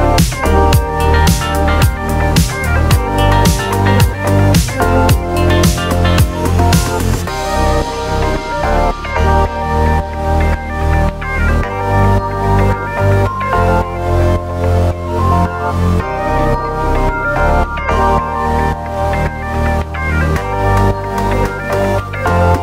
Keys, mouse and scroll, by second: 0.2 click, 0.5 scroll up 1, 1.0-2.3 drag, 3.5 click, 3.7 scroll down 1, 4.4-4.9 drag, 5.0 scroll down 2, 5.5 click, 6.2 click, 6.4 click, 7.6 click, 8.7 click, 11.2 click, 13.2 click, 14.3 click, 15.6 click, 16.0 scroll up 2, 16.5 scroll down 1, 17.3 click, 18.0-18.5 scroll up 2, 18.5 click, 19.0 scroll up 2, 19.3-19.6 scroll down 2, 19.6-20.8 right drag, 20.8-21.3 scroll down 2.